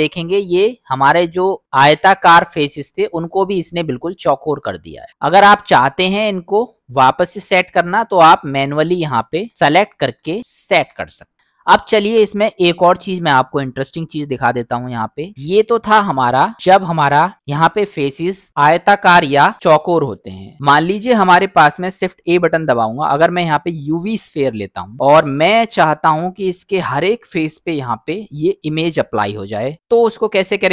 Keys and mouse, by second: 0.7-1.0 middle drag, 5.2-6.9 middle drag, 7.7 click, 8.4 middle drag, 9.1 shift+click, 9.5 middle click, 9.8 shift+click, 10.4 middle click, 10.7 shift+click, 11.2 middle drag, 13.1-13.8 drag, 14.5 click, 15.9 Delete, 21.6 shift+a, 24.9 middle click, 25.6 KP_Decimal.